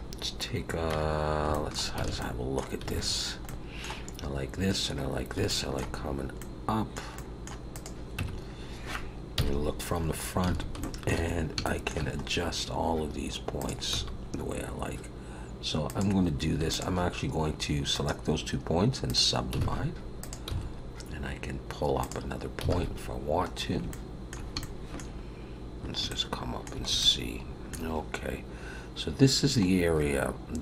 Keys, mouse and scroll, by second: 0.9 Tab, 1.2 scroll up 2, 1.5 shift+middle click, 2.0 a, 2.2 middle click, 2.9 alt+a, 3.4 middle click, 5.5 shift+middle click, 6.2 scroll up 2, 6.4 middle click, 7.1 middle click, 7.7 click, 8.2 Tab, 9.3 KP_1, 10.0 scroll up 4, 10.5 alt+a, 10.8 shift+middle click, 11.3 scroll up 2, 11.6 shift+middle click, 12.2 scroll up 2, 13.6 click, 13.9 g, 16.7 shift+click, 17.9 right click, 19.6 alt+a, 20.2 click, 20.5 g, 22.7 alt+a, 23.0-23.6 scroll down 5, 23.9 shift+middle click, 24.7 shift+middle click, 26.1 shift+middle click, 27.0 shift+middle click, 29.6 scroll up 2, 30.3-30.6 scroll down 1.